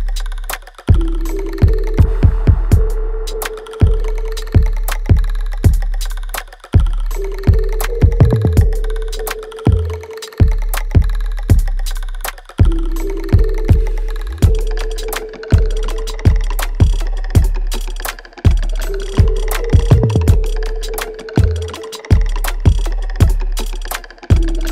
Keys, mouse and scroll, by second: 1.8-3.7 alt+drag, 4.2-8.0 alt+drag, 8.0-10.3 ctrl+drag, 10.3-12.9 alt+drag, 12.9 ctrl+click, 13.9-17.5 alt+drag, 17.5 right click, 17.5 right click, 18.2 click, 18.5-21.1 alt+drag, 21.1 alt+right click, 22.8 alt+middle click, 24.3 click.